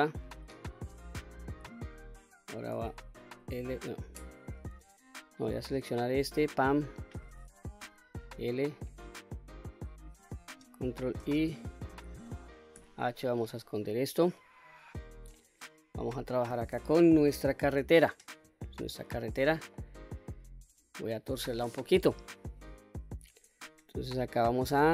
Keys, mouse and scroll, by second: 0.3 scroll down 1, 3.0 l, 4.3-5.2 middle drag, 6.2 click, 7.6 l, 8.5-10.3 middle drag, 10.6 ctrl+i, 12.5 h, 13.7-15.1 middle drag, 15.4 scroll up 1, 16.7 KP_7, 17.4-18.2 scroll down 1, 18.4-19.5 shift+middle drag, 24.4 1.